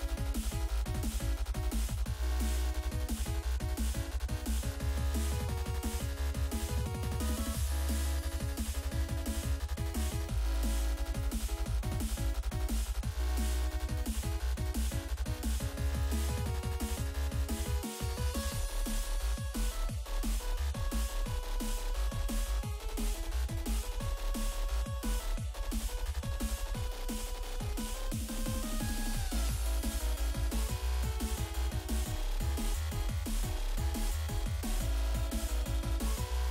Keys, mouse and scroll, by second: 2.2 click, 2.4 double click, 4.0 click, 4.7 0, 4.9 Return, 6.5 click, 7.7 click, 8.6 double click, 9.7-11.4 typing, 16.1 click, 16.2 double click, 17.6 click, 17.7 double click, 18.3-19.4 typing, 19.2 click, 19.3 click, 19.6 double click, 20.5 double click, 24.5 click, 25.4 click, 25.8 double click, 27.2 click, 28.0 click, 28.9 typing, 30.0 click, 30.1 click, 30.5 click, 31.3 click, 31.4 double click, 32.1 double click, 34.2 click, 34.2 click, 35.2 click, 35.7 scroll down 2.